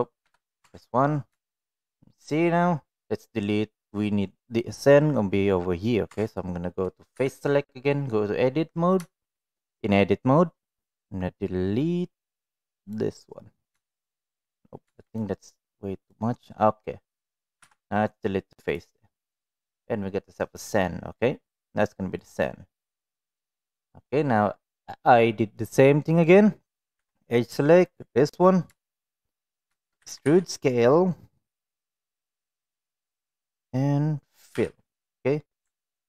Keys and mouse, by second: 0.2 KP_1, 0.6 Tab, 1.4 shift+middle click, 6.1 Tab, 7.2 3, 9.1 shift+middle click, 9.6-12.9 drag, 13.8 shift+middle click, 15.1 click, 17.6 Delete, 19.3-20.8 middle drag, 21.6 middle click, 25.5 middle click, 26.9 2, 27.8 alt+click, 28.7 shift+middle click, 29.9 e, 34.5 f.